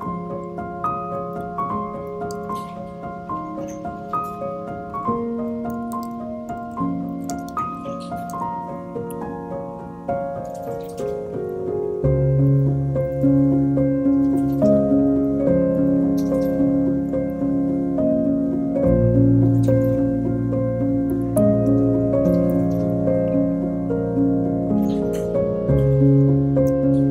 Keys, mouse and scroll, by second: 0.2 click, 0.7 shift+click, 2.4 ctrl+p, 4.9 click, 5.1-6.7 drag, 6.7 BackSpace, 8.6 shift+d, 11.1 shift+click, 11.3 shift+click, 12.5 shift+d, 15.0 click, 15.3 click, 16.0 click, 16.2 click, 17.3 click, 18.5 click, 19.1 click, 19.1 scroll up 2, 19.7 shift+click, 20.1 shift+click, 20.5 shift+click, 21.4 shift+], 21.9 shift+click, 22.5 ctrl+p, 23.2 ctrl+p, 23.3 scroll down 2, 23.5 click, 23.9-25.0 middle drag, 25.0 Tab, 25.6 click.